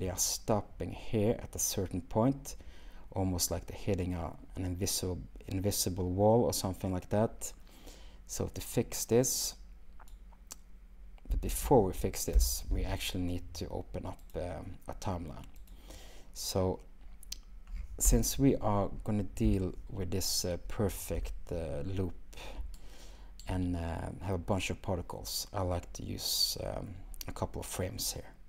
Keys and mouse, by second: 11.3 space, 14.4-15.8 shift+drag, 27.7-28.4 drag.